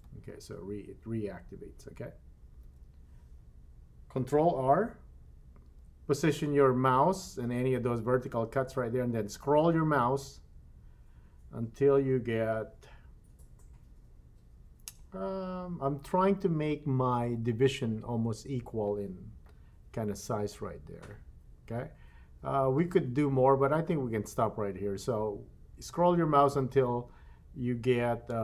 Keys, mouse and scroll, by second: 1.1 n, 2.6 n, 5.6 ctrl+r.